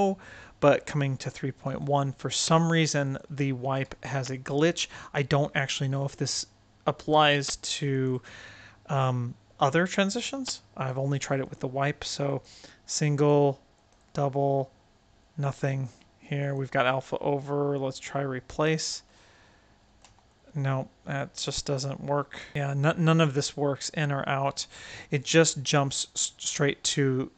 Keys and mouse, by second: 0.9-1.7 right drag, 3.0 click, 4.2 click, 7.8 click, 9.5-10.8 right drag, 11.4-12.4 drag, 13.0-13.8 drag, 14.2-15.8 right drag, 16.4-18.6 drag, 19.0-21.3 right drag, 20.0 r, 23.2 click, 24.3-27.3 right drag.